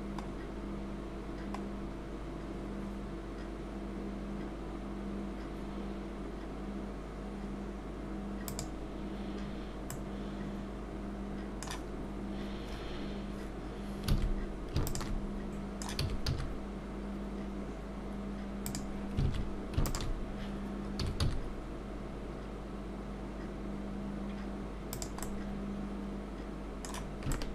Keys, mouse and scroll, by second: 9.5-9.9 scroll up 2, 9.9 middle click, 14.1 alt+a, 14.8 alt+shift+click, 15.5 middle click, 16.0 s, 19.4 alt+a, 19.9 alt+shift+click, 21.0 s, 25.2 middle click, 27.3 shift+middle click.